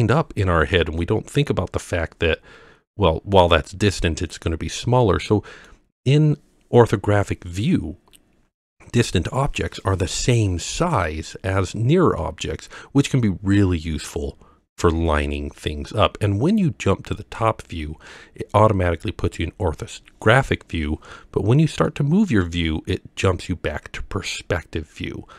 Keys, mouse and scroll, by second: 1.0-3.4 middle drag, 5.0-5.7 middle drag, 12.2-15.4 middle drag, 17.1 click, 21.9 middle click, 24.2-24.7 scroll up 3.